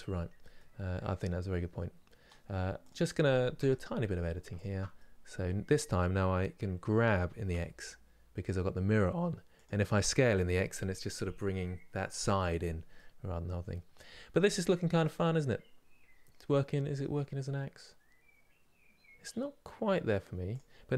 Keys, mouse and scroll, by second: 2.5 click, 3.2 Tab, 4.2 alt+click, 4.6-6.9 middle drag, 6.9 g, 12.7-20.2 middle drag, 20.2 click.